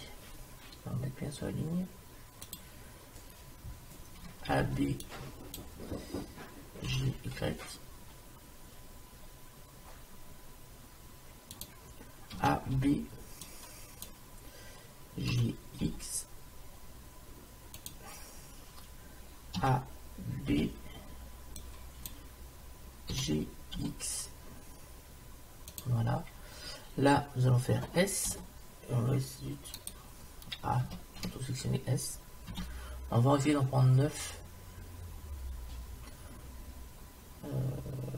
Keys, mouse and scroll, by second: 4.3 a, 4.6 b, 6.9 g, 12.4 a, 12.8 b, 15.3 g, 19.6 a, 20.5 b, 23.2 g, 26.1-28.2 middle drag, 28.3 s, 30.9 a, 31.2 a, 32.5 s.